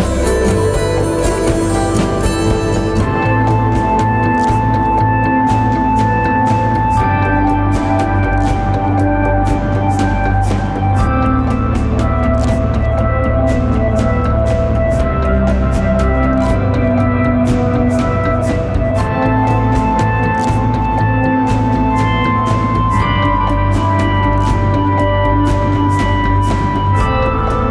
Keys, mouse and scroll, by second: 5.1 Return, 11.7 double click, 16.5 right click.